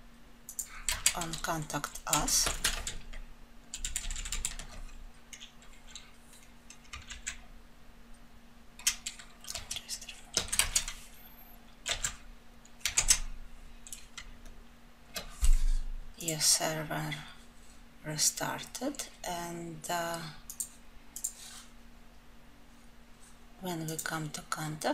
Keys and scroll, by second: 7.1 ctrl+/, 11.9 alt+F12.